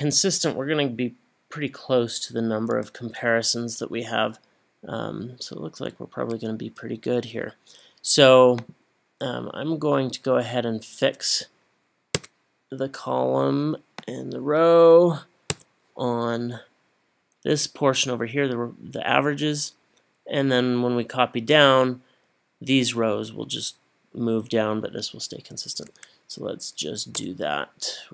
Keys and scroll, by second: 12.2 F4, 27.2 Return.